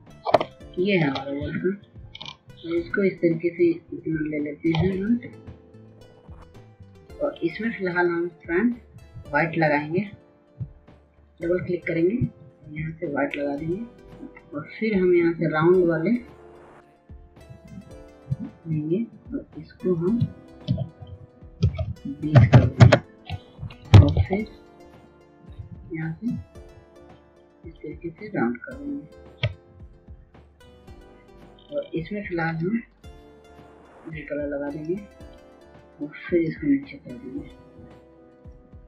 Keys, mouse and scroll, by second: 25.2-27.1 typing, 29.0 ctrl+space, 29.6 ctrl+space, 30.0 ctrl+space, 30.2-38.8 drag.